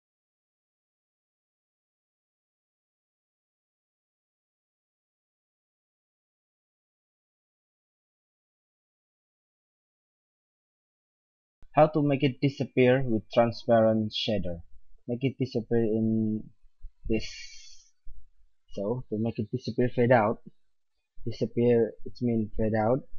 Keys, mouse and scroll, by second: 0.3-0.8 drag, 0.8-1.4 middle drag, 4.7 click, 7.0 click, 7.6-8.8 middle drag, 9.7-10.2 middle drag, 13.3-15.3 middle drag.